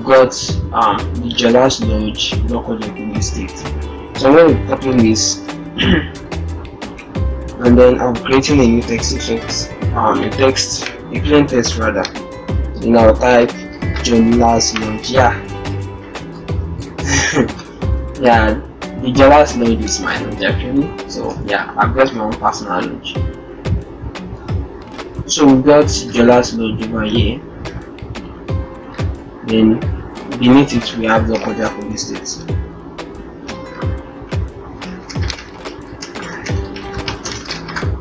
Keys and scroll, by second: 5.1 ctrl+c, 15.2 shift+l, 16.6 ctrl+Return, 31.0 ctrl+alt+shift+Return, 34.7 ctrl+a, 36.2 ctrl+shift+k, 37.1 ctrl+shift+s.